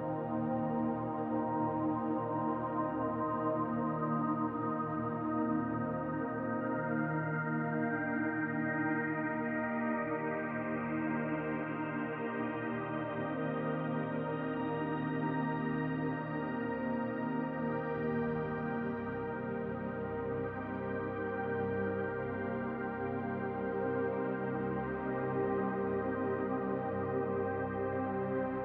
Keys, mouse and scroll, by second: 1.8 e, 4.4 m, 11.1 Tab, 12.2-13.8 scroll down 2, 13.8 click, 15.4 click, 16.5-18.9 drag, 18.9 Tab, 21.8 click, 25.6 click, 27.6 typing.